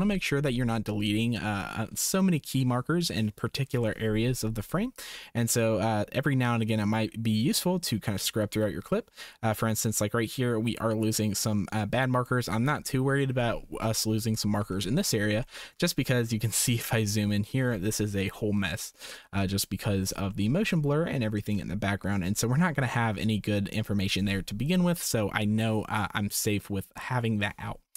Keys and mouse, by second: 4.9-12.2 drag, 15.4 shift+click, 20.4 shift+middle click, 21.5 shift+middle click.